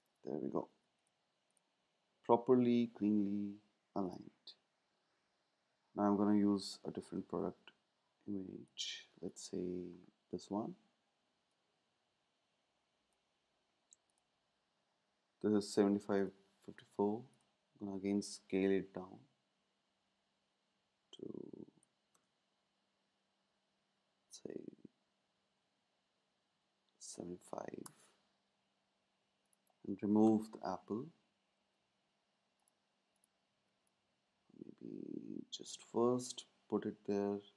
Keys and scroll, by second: 0.8 super+s, 7.2 space, 18.7 shift+Down, 18.9 shift+Down, 23.4 Up, 23.5 Up, 24.0 Up, 24.9 Up, 25.1 Up, 25.3 Up, 25.5 Up, 26.1 Up, 26.4 Up, 27.7 Return.